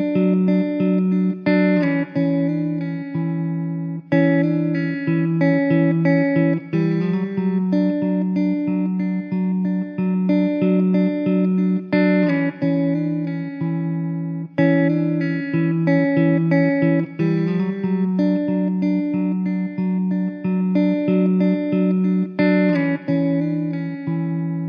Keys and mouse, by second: 1.6 middle click, 3.5 middle click, 6.2 middle click, 15.0 middle click, 19.4 middle click, 23.0 middle click.